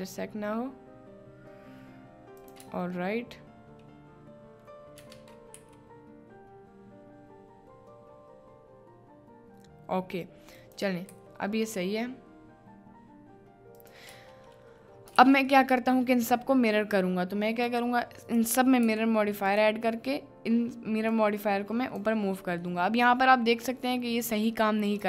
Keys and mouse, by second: 2.4 click, 2.6 Tab, 4.3 middle click, 5.0 Tab, 5.5 g, 10.6 click, 11.1 g, 13.8 click, 14.1 Tab, 15.2 ctrl+s, 15.6 middle drag, 17.8-19.6 drag, 21.1-22.1 drag, 22.8 middle drag.